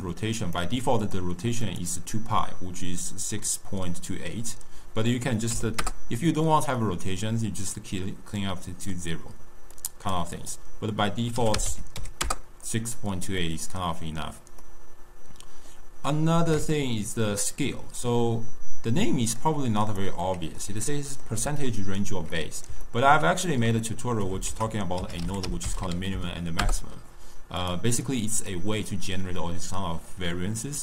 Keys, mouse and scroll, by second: 1.6-4.7 drag, 6.7-8.8 middle drag, 8.8-9.6 scroll down 1, 9.6-13.3 drag, 13.3-19.3 middle drag, 19.3 click, 20.1-24.4 middle drag, 24.4 ctrl+a, 28.0-30.8 drag.